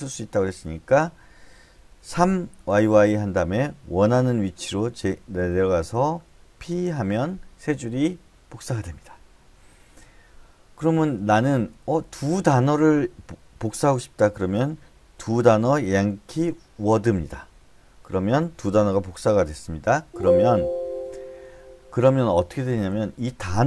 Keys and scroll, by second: 0.6-6.6 typing, 10.9-12.4 typing, 15.2-16.7 typing, 20.0 Escape, 21.5 j, 22.7-23.6 typing.